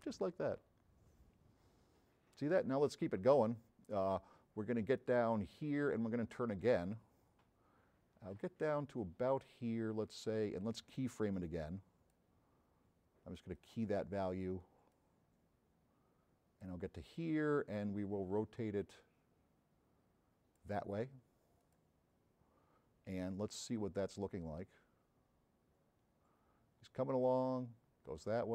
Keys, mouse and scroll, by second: 7.4-10.2 drag, 11.4 click, 13.6 click, 14.9-16.9 drag, 17.7-20.7 drag, 21.7 click, 24.2-28.5 drag.